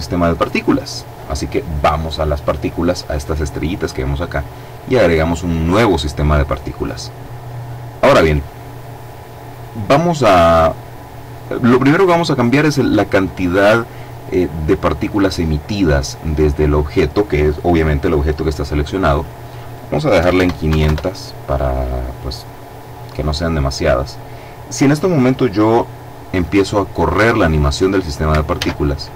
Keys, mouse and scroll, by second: 0.6 click, 4.4 click, 18.9 click, 20.0 KP_5, 20.1 KP_0, 21.8-22.7 scroll down 2, 22.7-23.1 scroll up 2, 23.1 middle click, 28.4 alt+a.